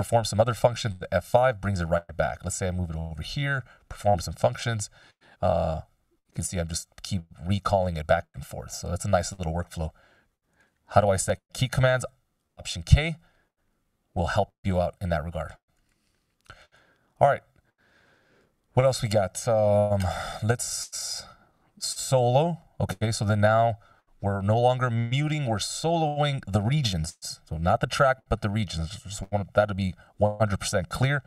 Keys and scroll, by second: 1.2 F5, 5.1 F5, 8.0 F5, 11.9 alt+k.